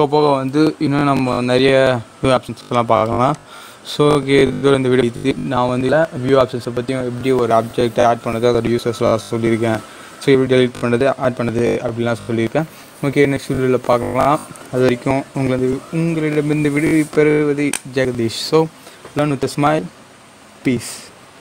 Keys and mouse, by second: 0.4-1.5 typing, 2.8 click.